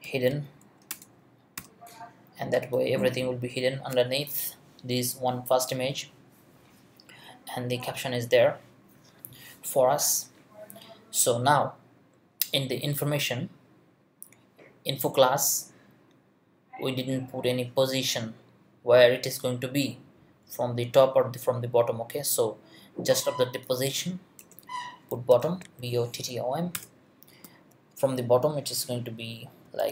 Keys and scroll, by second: 0.0-1.6 typing, 0.9 Return, 24.4 Return, 24.9-26.1 typing, 27.3 space, 29.4-29.9 typing.